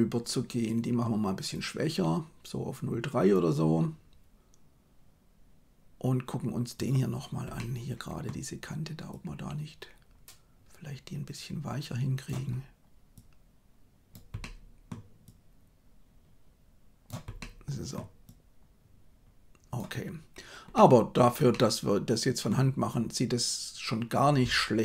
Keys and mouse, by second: 1.5-3.3 drag, 6.7 right click, 7.5 middle click, 9.2-12.3 drag, 13.1 click, 14.3 middle click, 15.2-17.0 drag, 17.3 middle click, 18.2-19.8 drag, 20.7 middle click, 21.4 middle click.